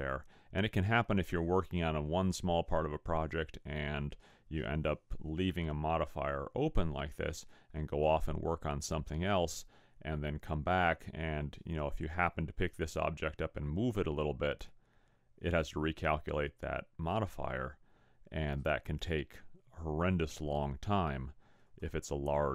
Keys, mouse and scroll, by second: 12.0 click, 20.5 click.